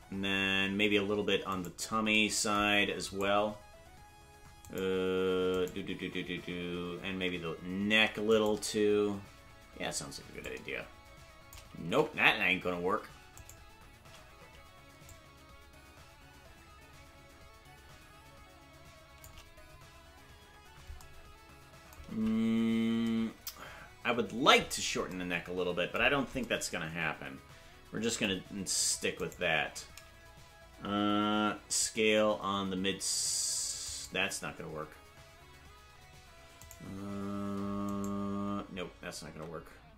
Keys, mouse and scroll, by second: 1.6-2.1 right drag, 3.2 right click, 6.6 right click, 7.9 ctrl+Tab, 8.5-10.4 right drag, 10.4-11.6 drag, 12.4 ctrl+z, 13.6 shift+right click, 15.1-19.3 drag, 22.7 ctrl+z, 29.5 right click, 39.3 ctrl+Tab, 39.3 right click.